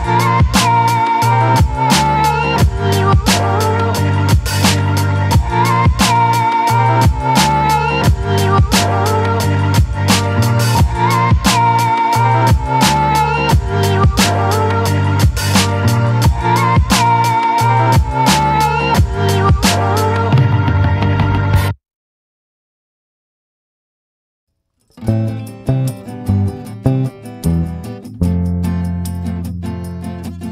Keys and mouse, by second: 0.3 click, 1.2 click, 2.5 ctrl+z, 3.0-4.5 drag, 5.1 click, 5.9 ctrl+z, 6.5-9.4 drag, 10.0 click, 10.4 click, 11.0 ctrl+z, 11.5-12.8 drag, 14.1 click, 14.9 ctrl+z, 15.2 click, 16.3 click, 17.7 click, 18.1 ctrl+z, 18.4 click, 18.4 right click, 19.2 right click, 23.8 middle click, 24.3 middle click, 25.1 shift+middle click, 27.8-30.3 middle drag.